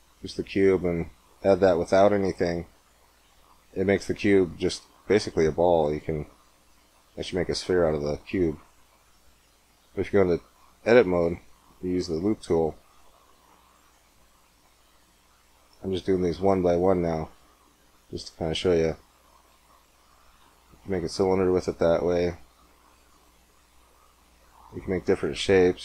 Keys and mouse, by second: 2.9-6.2 middle drag, 6.2-8.7 drag, 8.7-9.7 middle drag, 9.7 Tab, 11.7 ctrl+r, 15.9 ctrl+r, 18.9 click, 19.4-20.8 middle drag, 20.8 ctrl+r, 24.3-25.7 middle drag, 25.7 ctrl+r.